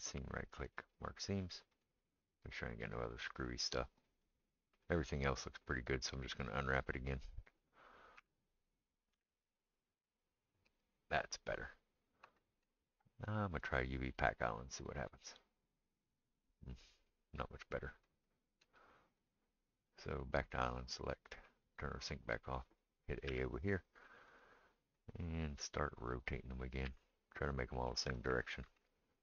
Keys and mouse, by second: 8.2 a, 9.1 u, 15.1-17.2 drag, 15.1-17.2 right drag, 17.2-19.3 middle drag, 19.3-29.2 right drag, 22.0 click, 22.0 middle click, 23.3 a, 24.4 click, 26.9 r, 28.7 g.